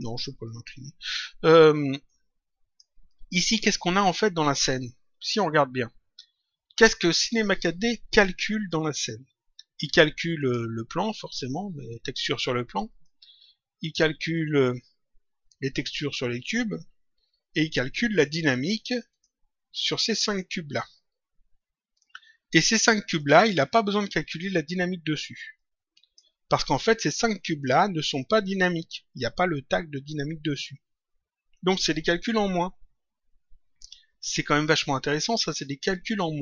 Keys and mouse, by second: 2.0 click, 10.3 click, 12.9 click, 19.0 click, 22.7 click, 25.5 click.